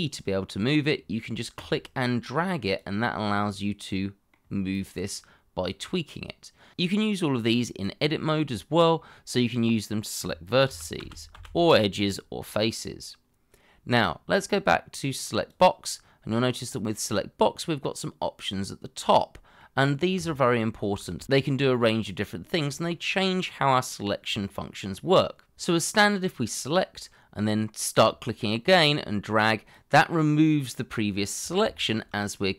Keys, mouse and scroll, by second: 3.3 middle click, 10.7 ctrl+z, 19.1 middle click, 21.9 shift+middle click, 31.7 shift+middle click.